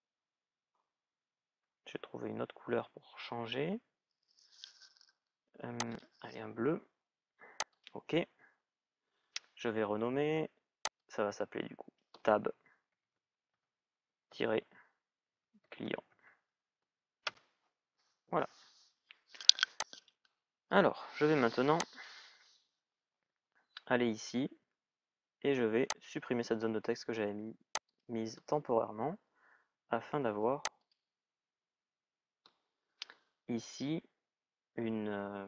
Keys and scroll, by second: 12.4-13.8 typing, 15.1 shift+c, 17.1 Return, 28.8 Delete.